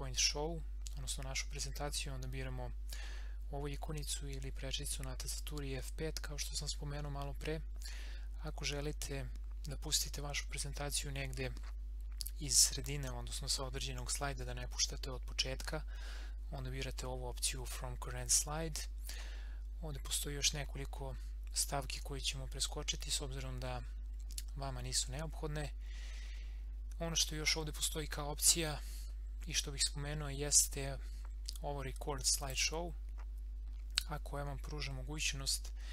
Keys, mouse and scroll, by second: 32.4 click.